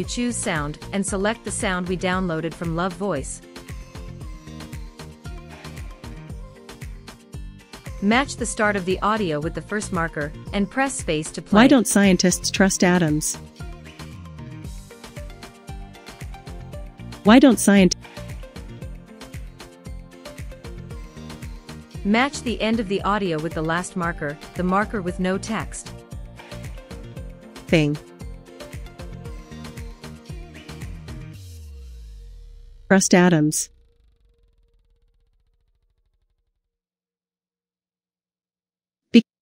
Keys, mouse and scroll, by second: 10.6 click, 11.2 space, 13.3 space, 16.4 click, 17.1 space, 17.8 space, 22.1-24.2 drag, 25.1 click, 25.7 space, 26.5 space, 27.1 click, 27.5 space, 28.2 space, 29.7 click, 30.4 click, 32.4 click, 32.7 space, 35.9 click, 35.9 space, 36.4 click, 38.3 space.